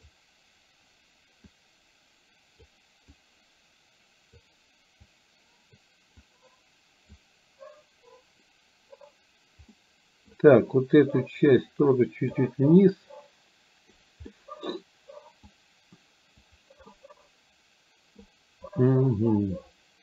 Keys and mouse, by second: 1.5-2.7 drag, 3.2-4.5 drag, 5.0 click, 6.3 click, 9.8 middle click, 11.7 click, 12.9-14.0 drag, 14.3 middle click, 15.5-16.5 drag, 16.9 middle click, 17.7 middle click.